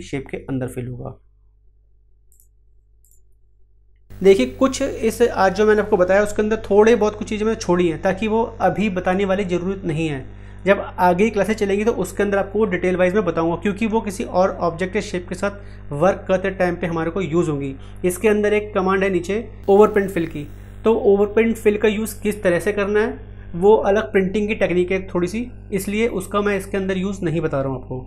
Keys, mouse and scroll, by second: 2.3 click.